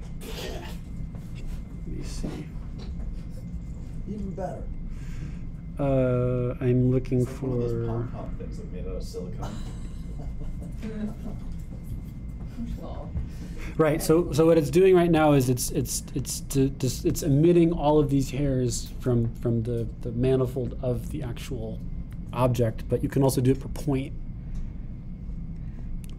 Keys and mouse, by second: 1.4-4.1 drag, 10.8-26.1 drag.